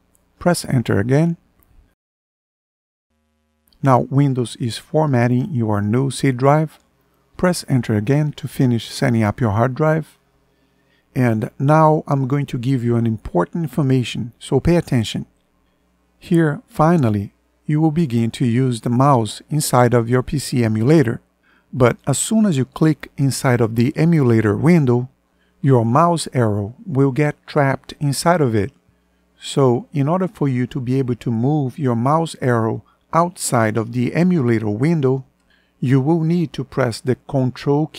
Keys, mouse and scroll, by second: 0.5 Return, 7.5 Return.